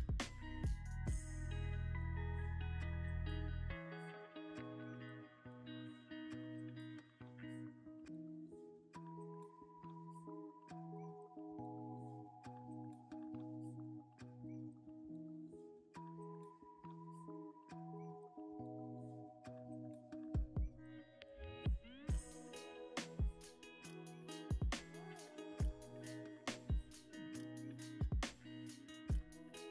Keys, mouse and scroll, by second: 1.5 s, 2.4 middle click, 2.9-6.4 drag, 3.7 g, 3.8 z, 5.8 right click, 9.5 double click, 10.4 a, 10.9 g, 11.0 z, 14.1 ctrl+a, 21.0 middle click, 23.3 scroll up 1, 23.4-23.8 scroll down 1, 23.8 middle click, 24.2 Tab, 25.6 shift+click, 26.2 e, 27.0 x, 28.4 double click.